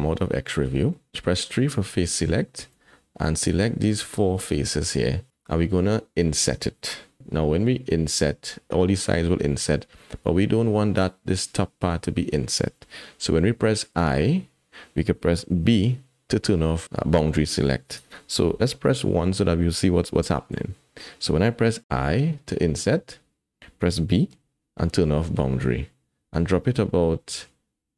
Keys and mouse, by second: 0.9 click, 1.1 3, 3.4 shift+click, 20.5 KP_1.